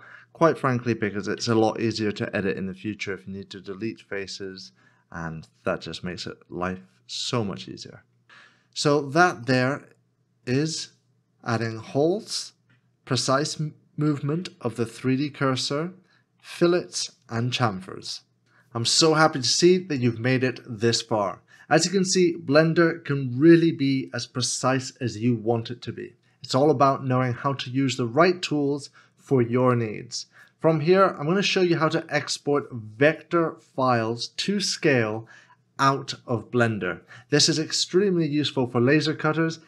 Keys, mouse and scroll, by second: 9.5 middle click.